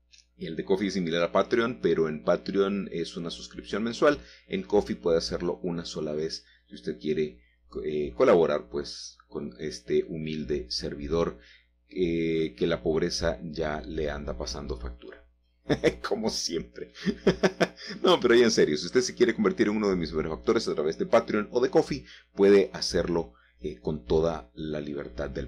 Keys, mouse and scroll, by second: 0.7 typing, 3.1-4.6 typing, 6.0 Escape, 7.2 g, 7.8 z, 11.4 shift+click, 13.1-15.4 drag, 16.1-17.1 scroll up 2, 17.1 shift+middle click, 18.4 g, 19.1 z, 21.4 click, 22.7-25.4 shift+middle drag.